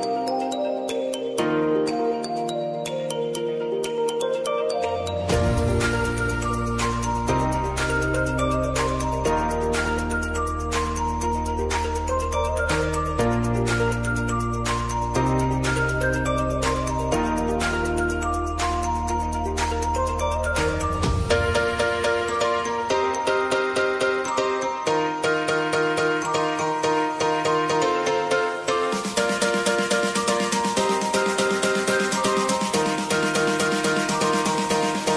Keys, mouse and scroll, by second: 5.0-7.4 drag, 9.3 space, 13.8 space, 14.4 click, 14.9 space, 17.5 space, 18.1 click, 18.7-19.6 typing, 20.8 s, 21.3 scroll down 1, 22.6 alt+click, 23.3-24.5 typing, 24.9 Left, 26.7 o, 27.5 Return, 27.9 ctrl+a, 28.5 ctrl+c, 29.5 alt+click, 30.2 ctrl+v, 30.7 alt+click, 31.3 ctrl+v, 31.9 alt+click, 32.4 ctrl+v, 33.0 alt+click, 33.6 ctrl+v, 34.2 alt+click, 34.8 ctrl+v.